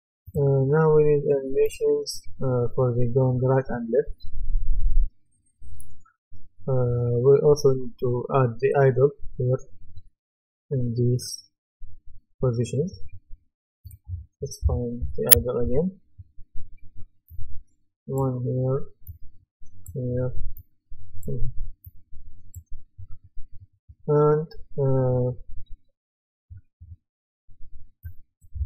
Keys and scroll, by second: 14.7-16.1 typing.